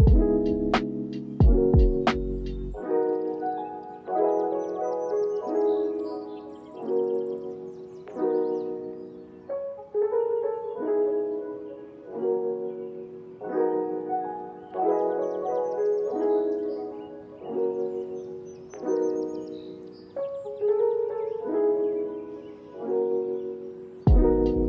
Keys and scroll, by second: 0.3 x, 5.7 4, 5.9 Return, 6.7 ctrl+c, 7.1 z, 10.5 KP_Subtract, 10.7 4, 10.8 Return, 11.3 ctrl+s, 11.9 space, 15.4 space, 15.8 ctrl+s, 16.8 space, 18.3 ctrl+s, 20.6 ctrl+s, 23.7 ctrl+a.